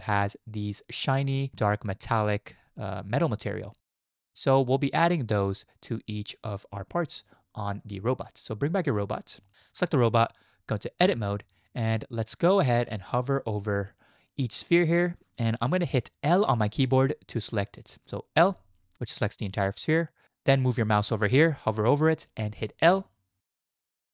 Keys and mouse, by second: 8.9 click, 9.8 click, 11.0 Tab, 18.5 l, 22.9 l, 23.7 shift+middle click.